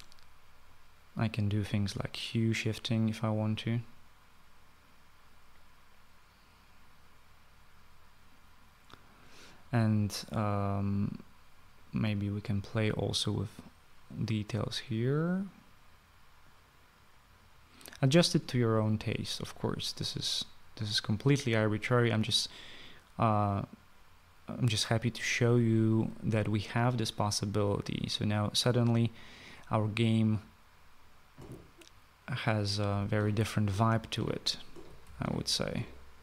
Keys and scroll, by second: 32.9-36.2 typing.